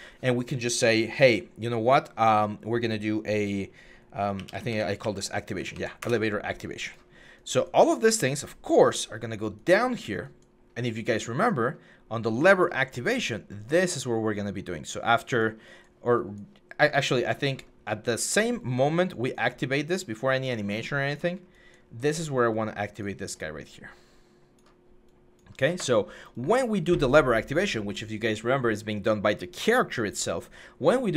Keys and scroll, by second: 4.1-4.8 typing, 5.3 Up, 5.5 Up, 5.8 Return.